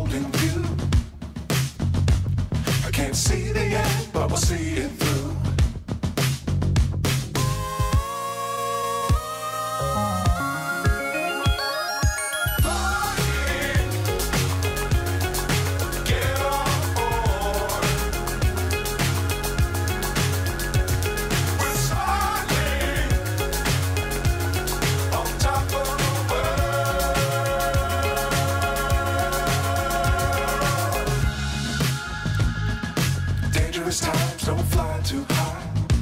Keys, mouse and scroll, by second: 0.1 right click, 0.6 shift+d, 2.7 g, 3.6 g, 3.8 click, 4.2 r, 5.3 click, 6.5 r, 7.6 click, 19.0 g, 19.9 g, 20.0 middle click, 20.8 drag, 21.8 g, 23.7 g, 24.3 g, 25.9-27.9 middle drag, 28.4 middle click, 29.0 middle click, 29.5 g, 30.9 click, 31.0 click, 32.3 click, 33.6-36.0 middle drag.